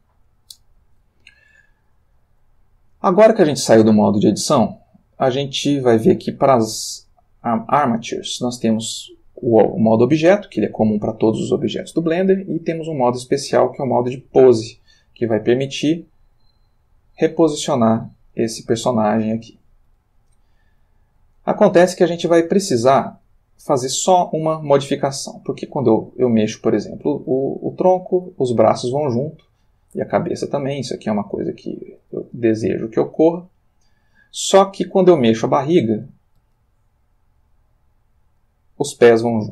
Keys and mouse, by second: 4.3 click, 13.1 click, 14.8 click, 15.7 r, 16.8 Escape, 17.5 click, 18.2 r, 19.5 Escape, 20.5 click, 21.1 r, 22.0 Escape, 23.0 click, 23.8 r, 24.6 Escape, 25.7 click, 26.4 click, 27.3 r, 29.6 Escape, 30.6 click, 30.9 r, 31.6 Escape, 32.3 click, 32.6 r, 33.3 click, 34.0 click, 34.8 click, 36.4 r.